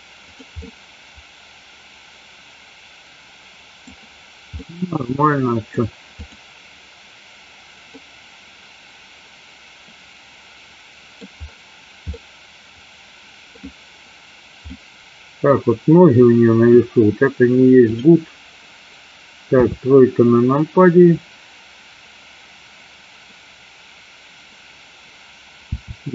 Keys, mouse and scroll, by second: 0.4 click, 0.8-4.0 middle drag, 4.6 scroll up 1, 4.9-5.8 middle drag, 6.3 click, 8.2-11.3 middle drag, 12.1-13.7 middle drag, 14.9 middle click, 19.7 KP_3, 25.8 r.